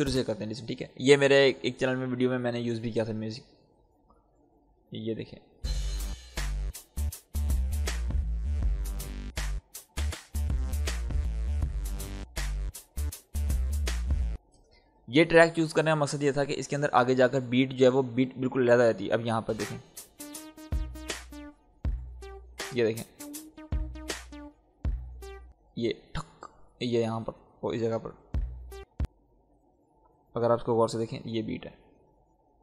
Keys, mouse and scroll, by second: 3.9-5.1 scroll up 1, 5.1 click, 5.5 space, 14.3 space, 16.1 space, 17.4 click, 17.9-18.7 scroll up 1, 19.2 click, 19.4 space, 25.4 space, 27.4-29.4 drag, 28.1 space, 30.0-31.2 scroll up 1, 31.2-32.6 drag.